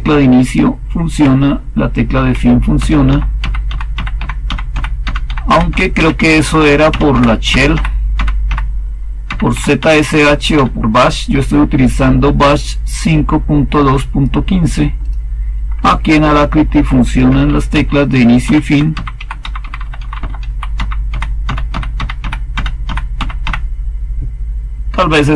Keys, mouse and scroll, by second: 1.1 End, 2.2 Home, 2.7 End, 3.0 Home, 3.3 End, 3.6 Home, 3.8 End, 4.1 Home, 4.4 End, 4.6 Home, 4.6-7.0 typing, 4.9 End, 5.2 Home, 5.4 End, 5.6 Home, 5.9 End, 6.1 Home, 6.8 End, 7.0 Home, 7.4 End, 7.6 Home, 8.0 End, 8.4 Home, 9.2 End, 9.4 Home, 9.7 End, 10.0 Home, 10.4 End, 15.8-16.8 Left, 17.2 Home, 17.6 End, 18.0 Home, 18.3 End, 18.6 Home, 18.8 End, 19.1 Home, 19.3 End, 19.7 End, 19.9 Home, 20.3 Home, 20.3 typing, 20.6 End, 21.0 Home, 21.3 End, 21.6 Home, 21.9 End, 22.1 Home, 22.4 End, 22.7 Home, 23.1 End, 23.3 Home.